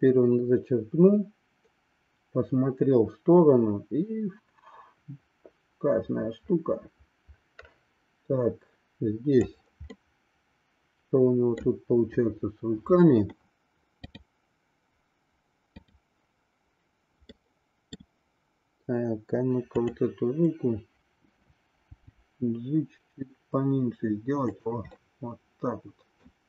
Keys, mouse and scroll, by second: 9.8-11.6 middle drag, 17.5 middle click, 19.7-21.0 drag, 21.8 g, 25.0 scroll up 1, 25.1-26.3 middle drag.